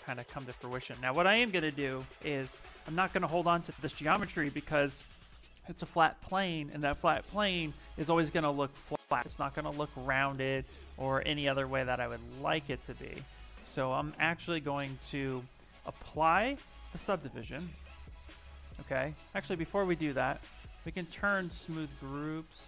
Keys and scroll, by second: 0.8 shift+f, 10.5 s, 13.1 s, 17.9 s, 19.0 z.